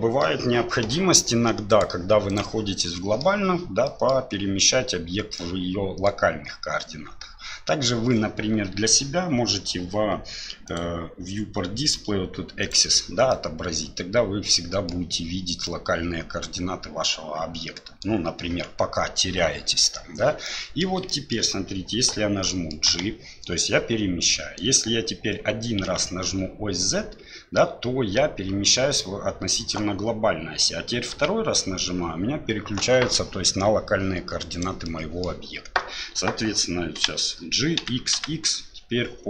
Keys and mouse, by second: 1.7-2.6 drag, 2.8-3.2 middle drag, 3.8 middle drag, 5.4-6.1 middle drag, 10.7 click, 12.6 click, 13.3-14.9 middle drag, 15.6-18.0 middle drag, 20.4-20.8 middle drag, 21.1 shift+middle drag, 22.4 middle drag, 22.9 g, 34.9-35.3 middle drag, 37.0 g.